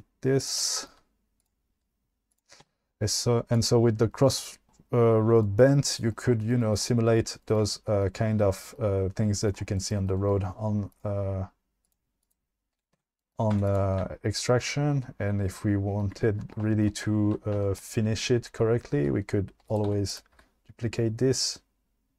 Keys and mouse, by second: 0.4 click, 1.4 click, 1.7 g, 2.3 click, 2.7 Tab, 3.5 click, 10.9 click, 11.8 click, 12.2 click, 13.0 Tab, 13.6 2, 13.7 click, 19.0 shift+d, 19.7 click, 19.9 1, 20.4 g.